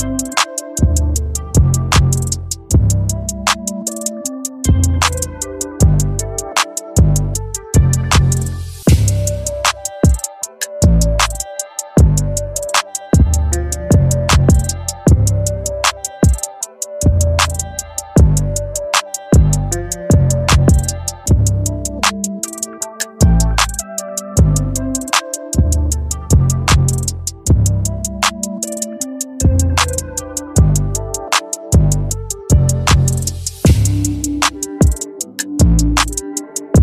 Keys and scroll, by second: 0.1 ctrl+j, 6.1 ctrl+t, 9.9 Return, 21.8 ctrl+j, 25.5 ctrl+t, 30.1 Return.